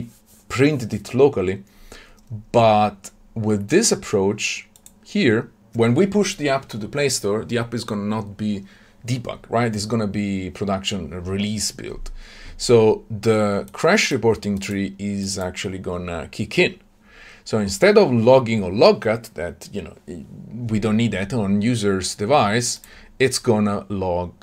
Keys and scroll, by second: 22.8 ctrl+b.